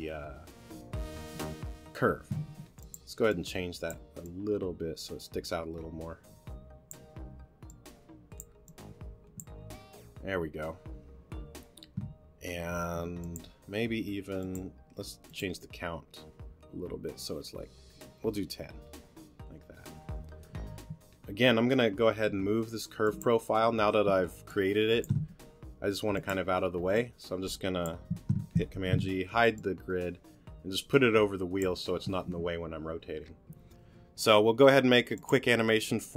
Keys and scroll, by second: 2.4 t, 12.9 t, 22.3 t, 25.2 t, 28.7 super+g.